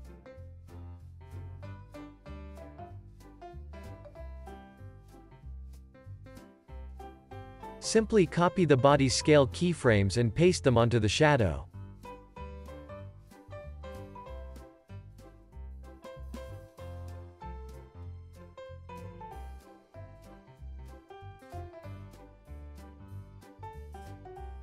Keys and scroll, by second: 4.6 z, 11.7 x, 15.7 super+c, 18.3 z, 19.1 c, 20.5 super+v, 21.4 space.